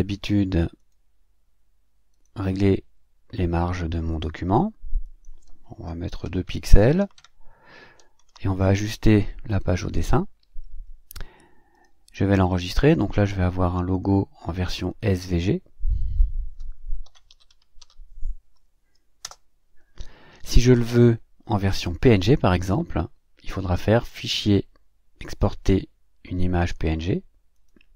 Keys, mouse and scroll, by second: 6.3 2, 6.5 Tab, 6.7 2, 6.8 Tab, 7.0 2, 7.2 Tab, 8.3 2, 16.8-18.3 typing, 19.2 Return, 23.5 click, 27.5 click.